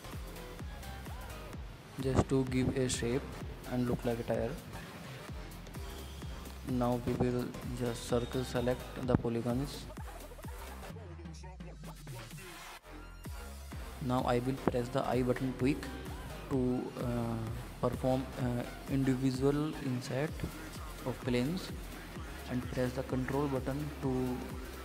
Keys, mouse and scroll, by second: 2.4-3.4 middle drag, 3.4 click, 3.6 scroll down 2, 3.9 middle click, 4.3 scroll up 2, 4.5-6.8 middle drag, 6.8 click, 7.9 alt+click, 8.3-9.8 middle drag, 11.9 alt+shift+click, 12.2-14.2 middle drag, 14.2 ctrl+z, 14.5 middle click, 14.8-15.1 scroll down 5, 15.1-15.7 scroll up 4, 15.7 middle click, 16.2 scroll up 2, 16.5 shift+middle click, 16.8 scroll up 2, 17.0 middle click, 17.6 scroll down 2, 17.8-19.3 middle drag.